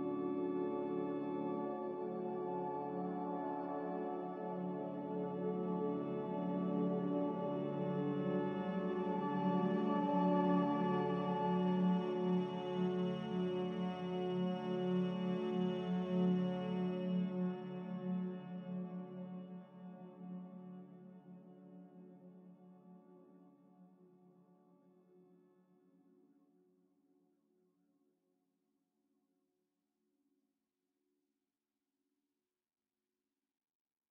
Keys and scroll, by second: 1.5 Delete, 6.4 z, 16.4 a.